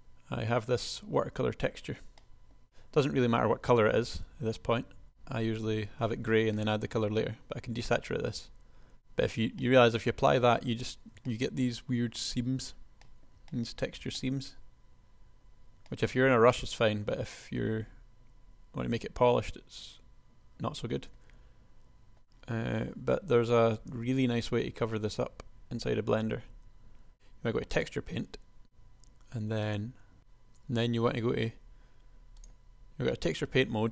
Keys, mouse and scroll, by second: 1.3 Tab, 14.6-16.2 middle drag, 17.0 middle click, 22.2 Tab, 22.5 Tab, 24.0 Tab, 24.7 Tab, 25.2 Tab, 26.7 Tab.